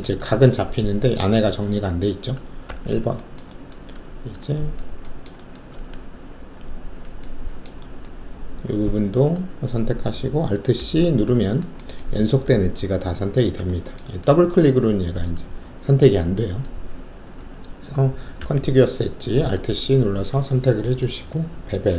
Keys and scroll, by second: 2.6 alt+1, 5.7 alt+2, 10.7 alt+c, 18.4 alt+c.